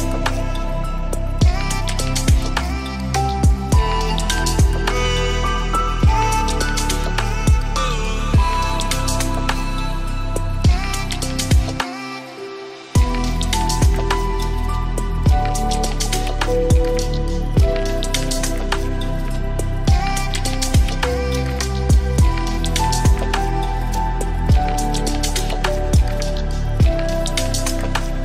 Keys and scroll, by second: 1.3 ctrl+shift+], 4.0 ctrl+space.